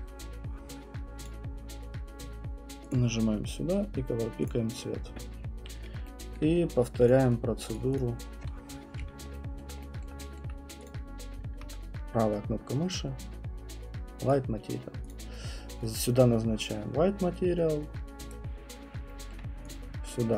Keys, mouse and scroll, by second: 1.3 click, 2.9 click, 4.5 click, 6.4 alt+middle click, 7.1 click, 7.7 right click, 8.0 click, 10.0 alt+middle click, 10.4 alt+middle click, 10.9 click, 14.3 right click, 15.1 click, 18.3 right click, 19.3 alt+middle click, 19.7 click.